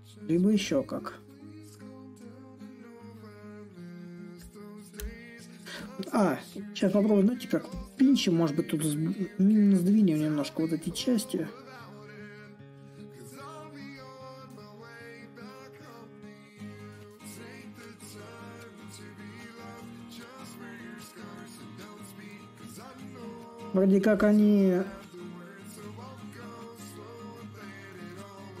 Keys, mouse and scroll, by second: 0.0-5.0 drag, 7.4-8.9 drag, 8.9 s, 10.6-15.6 drag, 16.2-21.2 drag, 21.9-26.9 drag, 27.6-28.6 drag.